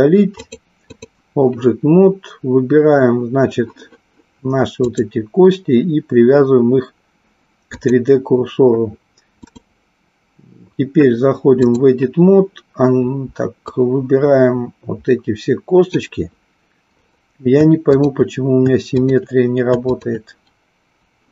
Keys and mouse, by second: 0.4 click, 4.9-7.9 drag, 9.4-11.9 drag, 13.8-15.9 drag, 18.9 shift+click, 19.9 shift+click.